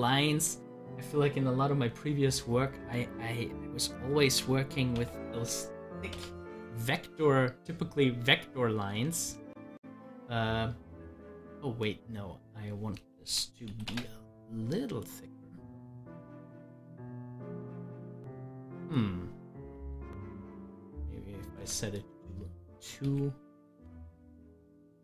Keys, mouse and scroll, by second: 0.4 ctrl+z, 0.7-4.1 drag, 4.1 1, 9.3 ctrl+z, 12.9 1, 15.1-17.5 drag, 17.5 ctrl+z, 19.9 ctrl+z, 21.7 2, 22.0 click, 23.0 ctrl+z.